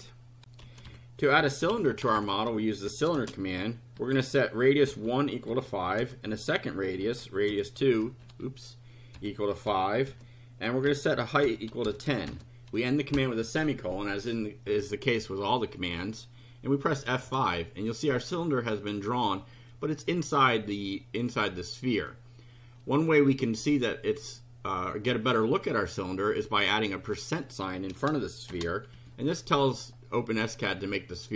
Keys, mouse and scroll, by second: 0.4 ctrl+r, 0.6 ctrl+c, 0.8-4.2 typing, 5.5-13.1 typing, 17.1 F5, 27.0 click, 28.5 shift+5, 28.9 shift+F5.